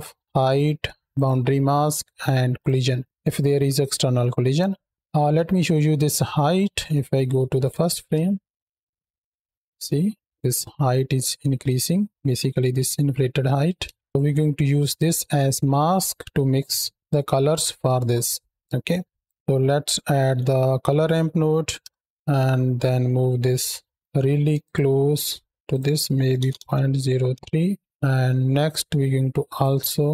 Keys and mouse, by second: 0.9 ctrl+shift+click, 2.4 ctrl+shift+click, 3.4-3.9 middle drag, 7.4 click, 8.0 space, 9.2-9.5 shift+middle drag, 10.1-10.5 middle drag, 12.3-13.4 middle drag, 13.7 space, 16.4 click, 18.6 click, 22.6-23.4 drag, 24.4 ctrl+shift+click, 25.5-27.2 drag, 29.3 click.